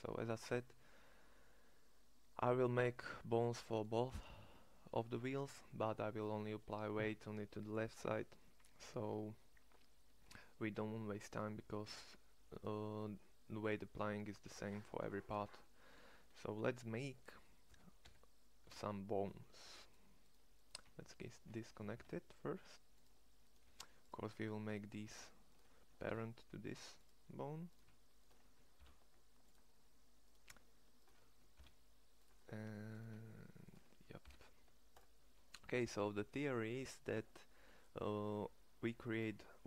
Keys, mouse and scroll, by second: 11.9 Tab, 17.6 e, 21.8 alt+p, 23.5 g, 25.9 ctrl+p, 28.7 ctrl+p, 31.4 ctrl+p, 34.1 ctrl+p.